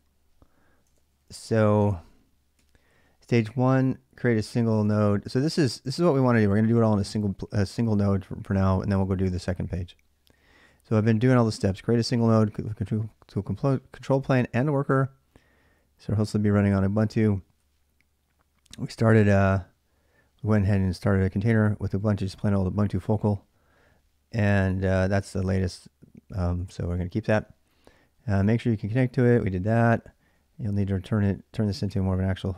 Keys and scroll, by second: 0.7 ctrl+[, 0.8-2.8 typing, 4.6 ctrl+[, 4.9 ctrl+j, 8.4 j, 8.7 j, 8.7 j, 9.5-10.0 j, 11.1-13.3 typing, 14.8 j, 17.0 k, 17.2 k, 18.8 j, 19.0 j, 20.2-21.7 typing, 23.8-24.5 k, 24.6 k, 24.8 k, 26.4 j, 26.5 j, 28.0-30.2 typing.